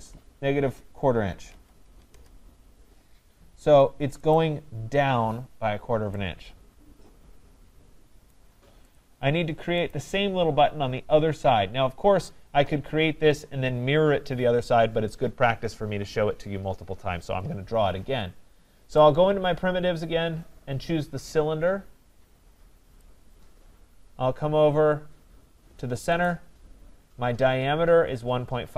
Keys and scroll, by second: 2.1 Return.